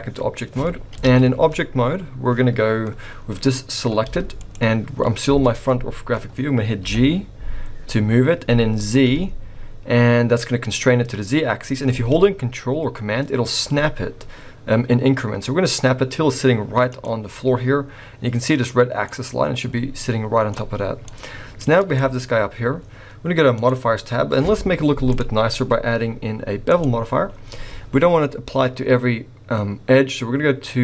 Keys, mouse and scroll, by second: 0.9 KP_1, 3.0-4.0 scroll down 1, 4.0 scroll down 1, 4.0 g, 5.0-6.3 scroll up 1, 6.3-6.8 scroll up 1, 6.8 g, 19.1 middle click, 20.7-21.1 scroll down 4, 21.0 middle click, 22.0 shift+middle click, 22.2-23.4 scroll up 1, 23.4 scroll up 1, 23.6 click, 25.1 click, 27.3-28.1 scroll up 3.